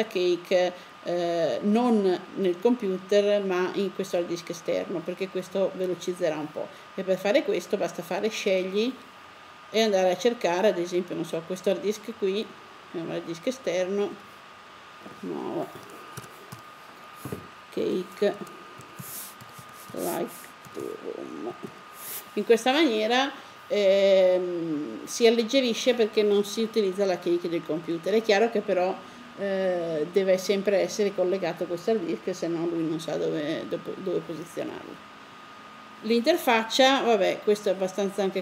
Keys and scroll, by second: 15.5-17.5 typing, 18.6-19.2 typing, 20.3-21.4 typing.